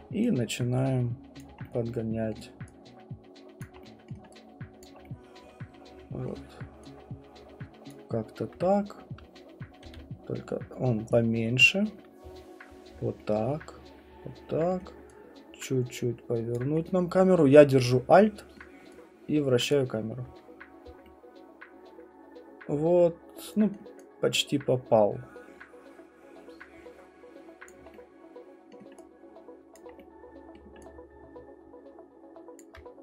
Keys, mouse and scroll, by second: 2.3 alt+middle click, 3.6 alt+click, 9.8 r, 11.7 click, 14.7 alt+middle click, 16.5 alt+click, 18.6 alt+middle click, 19.7 alt+click, 23.7 alt+middle click, 27.7 alt+click, 28.7 alt+middle click, 29.8 alt+click, 30.5 alt+middle click.